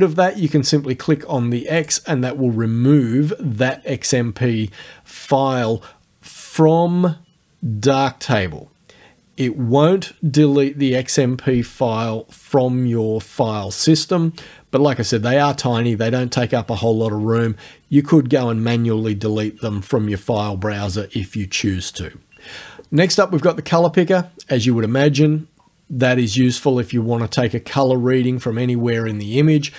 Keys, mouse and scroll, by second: 1.8 click, 3.7 click, 23.0 click.